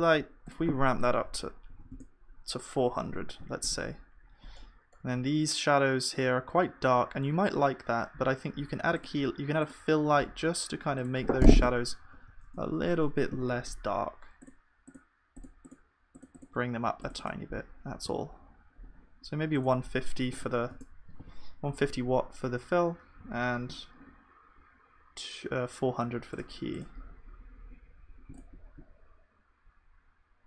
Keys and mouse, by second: 1.8 KP_0, 3.1 ctrl+s, 4.2-12.2 middle drag, 12.2 KP_0, 18.1 ctrl+s, 27.3-28.8 middle drag.